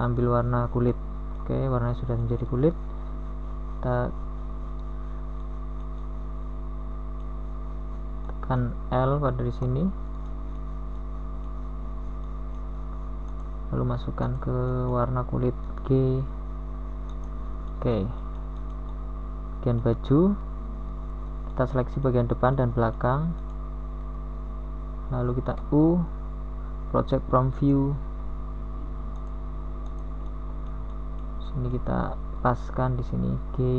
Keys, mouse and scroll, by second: 5.2 g, 9.4 middle click, 11.1 z, 12.1 a, 12.9 z, 13.6 z, 16.0 z, 17.1 z, 18.3 l, 19.3 z, 20.2 KP_1, 24.3 g, 28.6 z, 29.0 KP_1, 30.6 z, 32.6 KP_1.